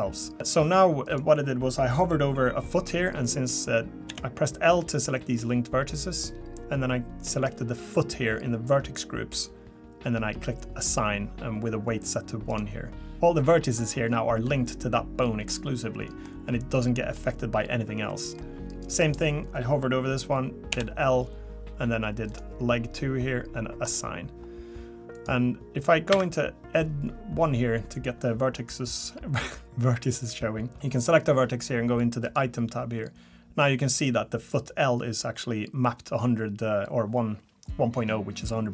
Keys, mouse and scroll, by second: 1.0 click, 4.1 l, 7.3 click, 12.5 click, 15.5 middle click, 16.4-16.9 scroll up 2, 16.9 middle click, 18.1 middle click, 18.7 click, 20.7 l, 22.3 click, 23.8 click, 25.1 click, 26.1 1, 30.7 click, 32.2 click.